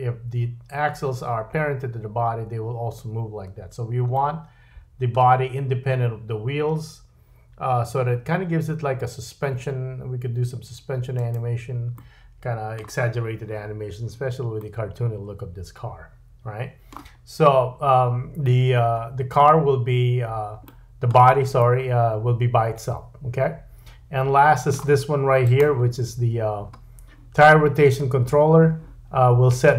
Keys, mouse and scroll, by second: 4.1 middle click, 8.5 r, 12.0-24.6 middle drag, 17.2-18.2 scroll up 2, 18.2-19.2 scroll down 1, 19.2-20.6 scroll down 1, 20.6 scroll down 1, 25.4 click, 26.0-28.4 scroll up 2.